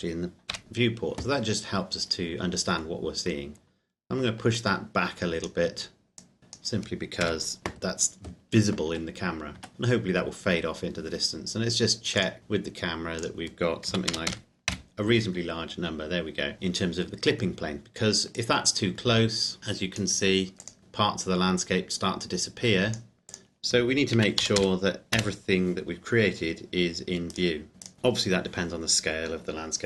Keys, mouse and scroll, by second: 0.6 KP_0, 2.1 middle click, 3.0 scroll down 1, 4.5 click, 7.2 KP_0, 8.9 Tab, 12.3 click, 13.9 KP_3, 14.1 KP_0, 14.7 KP_Enter, 18.4 click, 24.2 KP_3, 24.4 KP_0, 25.2 KP_Enter, 27.3 right click.